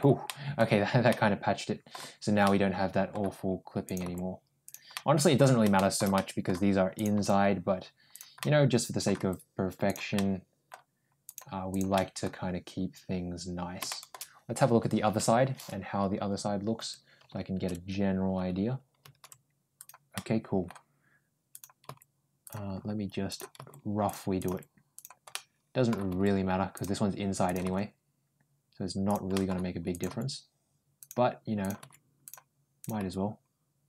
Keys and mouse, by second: 0.1 middle click, 0.9 middle click, 2.3 middle click, 3.7 click, 3.9 g, 4.8 middle click, 5.6 middle click, 6.0 middle click, 6.8 click, 7.0 g, 8.2 middle click, 9.0 g, 10.0 middle click, 11.1 click, 11.5 click, 11.8 middle click, 13.7 shift+middle click, 20.0 middle click, 21.4 click, 21.7 g, 23.1 click, 23.4 g, 24.2 click, 24.4 g, 25.1 middle click, 25.9 g, 27.3 click, 27.5 g, 29.2 middle click, 29.8 click, 29.9 g, 31.5 click, 31.6 g, 32.7 click, 32.8 g.